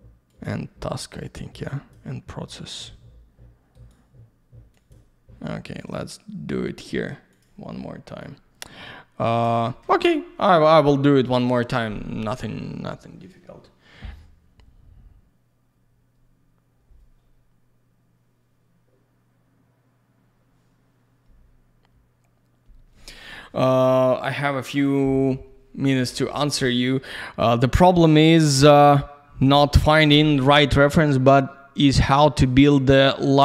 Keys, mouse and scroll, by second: 9.4 ctrl+shift+click.